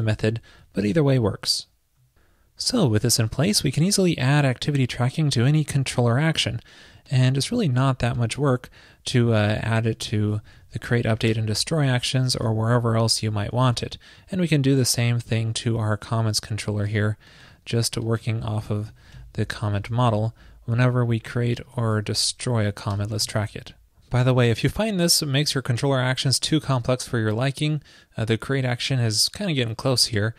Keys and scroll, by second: 2.0 super+z, 5.5 super+c, 7.4 super+v, 10.0 super+v, 10.5 super+Left, 12.6 super+s, 16.7 super+v, 20.0 super+c, 21.8 super+v, 22.0 super+Left, 23.3 super+s.